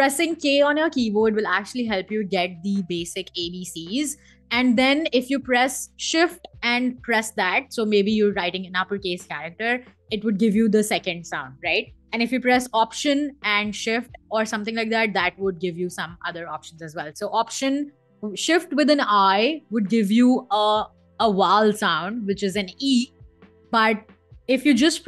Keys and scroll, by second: 9.3 shift+k, 12.4 alt+k, 13.3 alt+shift+k, 14.5 alt+k, 15.3 shift+k, 16.0 BackSpace, 16.6 shift+i, 23.5 BackSpace, 24.5 i.